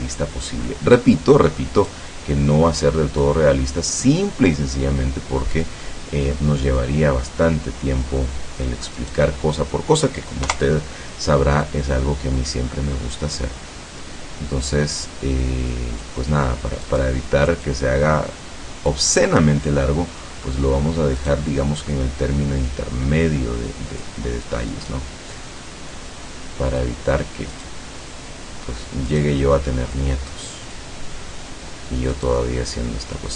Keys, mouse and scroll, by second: 1.8 right click, 3.2-5.0 drag, 5.4 middle click, 6.4 middle click, 9.0 right click, 9.4 middle click, 10.5 KP_0, 11.7-12.7 drag, 13.0-13.4 scroll down 1, 16.9 right click, 17.7-19.1 drag, 20.2 middle click, 21.2 right click, 22.0-24.2 drag, 24.7 right click, 25.3-27.0 drag, 27.6 right click, 29.2 right click, 30.0-31.0 drag, 32.2 right click.